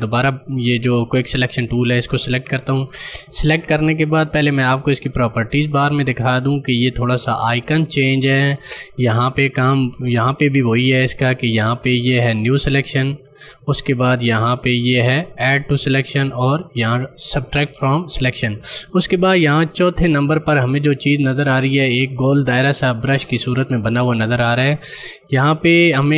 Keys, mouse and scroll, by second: 2.3 click.